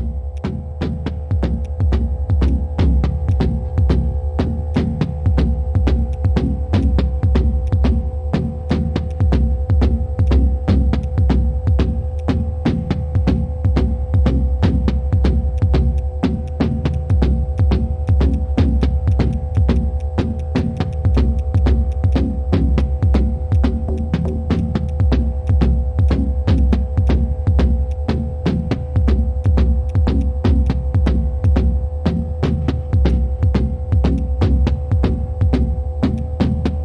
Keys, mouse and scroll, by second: 0.4 alt+click, 1.6 alt+click, 2.4 alt+click, 3.3 alt+click, 3.9 alt+click, 4.7 alt+click, 6.1 alt+click, 6.8 alt+click, 7.6 alt+click, 8.6 alt+click, 9.1 alt+click, 10.3 alt+click, 12.2 alt+click, 15.5 alt+click, 15.9 alt+click, 16.4 alt+click, 16.9 alt+click, 17.5 shift+click, 18.0 shift+click, 18.8 shift+click, 22.1 double click, 22.4 shift+click, 26.7 right click, 32.1 right click.